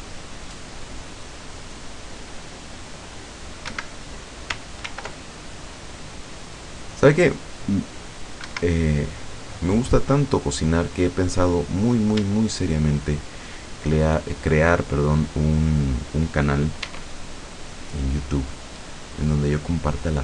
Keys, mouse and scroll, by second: 2.2 scroll up 2, 3.0 click, 3.8 Escape, 4.9 ctrl+r, 5.6-6.2 scroll up 2, 8.2 click, 8.5 Escape, 10.2 click, 10.8-11.4 scroll up 1, 11.7-13.4 middle drag, 13.4 shift+right click, 15.7 right click, 16.9 e, 19.3 click.